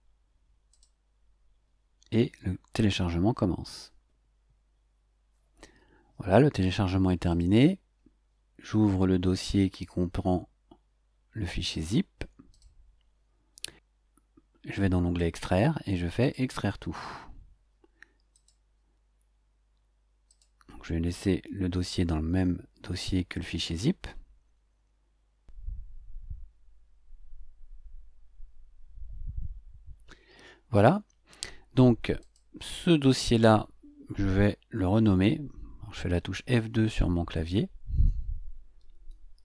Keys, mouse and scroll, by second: 0.7 click, 7.3 click, 12.5 click, 15.2 click, 16.2 click, 18.3 click, 20.3 click, 32.2 click, 36.5 F2, 38.6-39.4 typing.